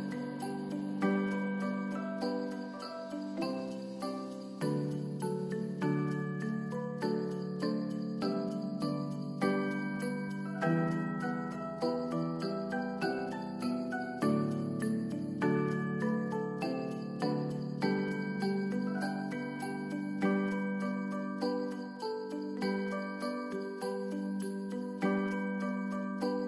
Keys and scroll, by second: 0.1 space, 8.6 space, 12.4 space, 14.2 space, 16.4 space, 23.1 n, 23.6 space.